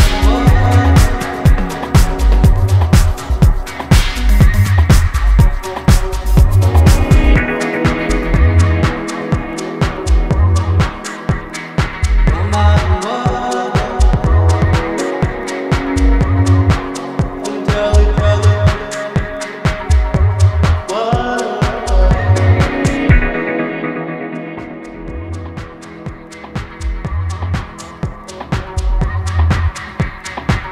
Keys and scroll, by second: 0.5 ctrl+i, 14.0 ctrl+KP_Subtract, 14.1 ctrl+KP_Subtract, 14.8 ctrl+z, 15.2 ctrl+KP_Add, 15.3 ctrl+KP_Add, 15.9 ctrl+KP_Subtract, 16.1 ctrl+KP_Subtract, 16.5 KP_Add, 16.6 KP_Add, 16.7 KP_Add, 21.9 ctrl+shift+g, 24.2 ctrl+j, 26.9 ctrl+z, 27.2 ctrl+z, 27.4 ctrl+z, 27.6 ctrl+z, 27.9 ctrl+z.